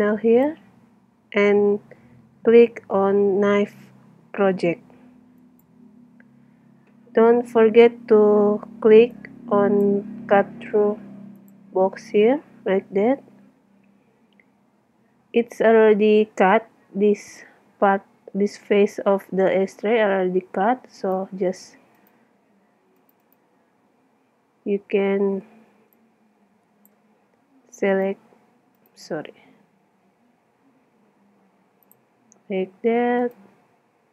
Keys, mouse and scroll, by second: 5.4-7.3 drag, 9.1-11.1 drag, 11.4-13.2 drag, 16.8-19.2 middle drag, 20.9-25.2 right drag, 25.2-26.5 middle drag, 26.5-27.5 drag, 28.0-30.3 right drag, 30.0 x, 34.0 x.